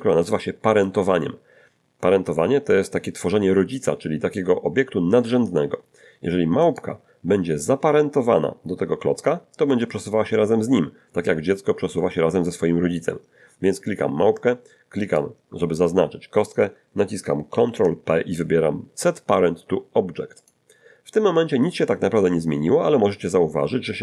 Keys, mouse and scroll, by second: 6.6 right click, 15.0 shift+right click, 17.5 ctrl+p, 20.4 click.